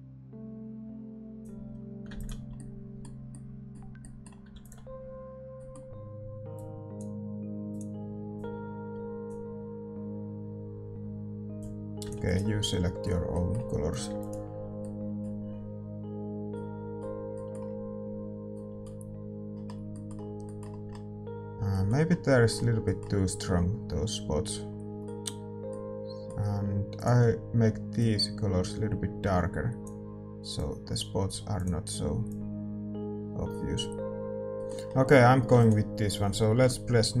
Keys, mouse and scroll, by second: 2.5-9.3 middle drag, 6.5 ctrl+s, 6.5-16.5 drag, 12.6 ctrl+s, 12.6-27.9 middle drag, 15.5 ctrl+s, 27.9-34.5 drag, 34.5 ctrl+s, 34.5-37.2 middle drag.